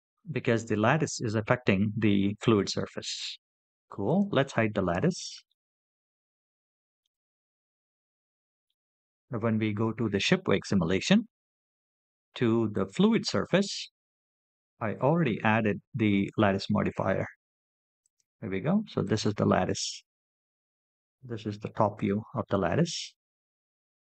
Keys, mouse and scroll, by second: 0.2-1.9 scroll up 2, 1.9 click, 2.6 click, 3.5 click, 4.3 click, 8.3 click, 12.5 click, 15.0-15.6 scroll down 2, 16.3-17.8 scroll down 2, 17.8 click, 18.8 click, 20.0 KP_7, 20.6-21.1 scroll down 4, 21.9-22.3 shift+middle drag.